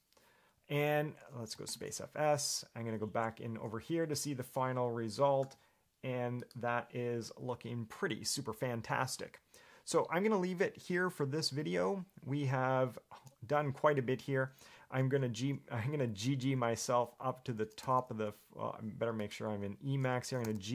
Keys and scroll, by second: 19.1-19.4 scroll.